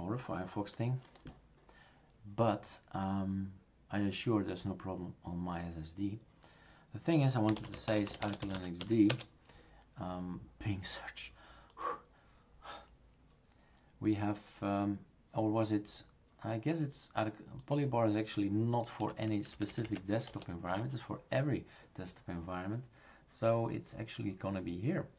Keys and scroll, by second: 7.3-9.3 typing, 19.0 Tab, 19.2 Right, 19.3 Left, 19.5 Left, 19.7 Left, 19.8 Left, 20.3 BackSpace, 20.7 Return.